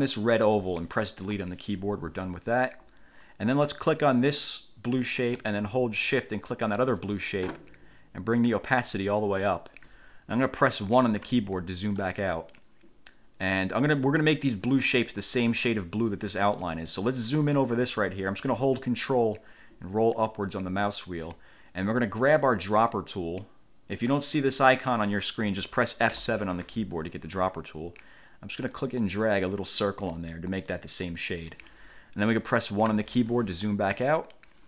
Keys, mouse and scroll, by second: 1.4 Delete, 4.1 click, 6.6 shift+click, 8.6 click, 11.4 1, 12.2-14.0 drag, 16.8 click, 19.8-20.6 ctrl+scroll up 2, 26.3 F7, 28.9-31.0 drag, 33.0 1.